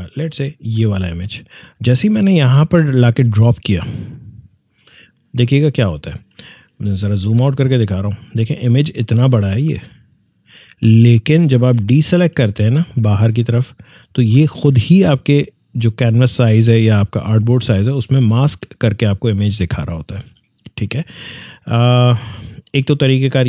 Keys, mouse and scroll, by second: 0.3-6.3 drag, 6.9 scroll down 2, 7.9-11.4 drag, 11.4 alt+scroll down 1, 13.5 click, 17.7 click, 17.8 alt+scroll up 1, 20.3-21.0 alt+scroll down 1, 22.2 click.